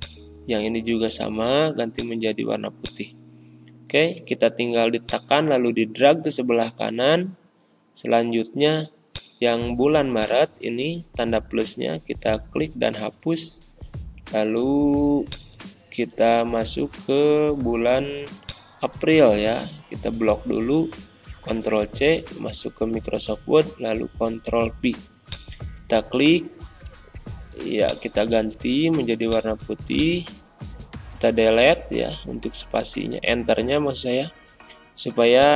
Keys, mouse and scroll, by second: 11.3 BackSpace, 12.4 Return, 15.2 click, 15.9 alt+Tab, 17.4 alt+Tab, 18.4-20.6 drag, 20.6 ctrl+c, 21.5 alt+Tab, 22.7 alt+Tab, 23.7 ctrl+v, 25.2 click, 27.8 click, 31.5 Delete, 35.3 click.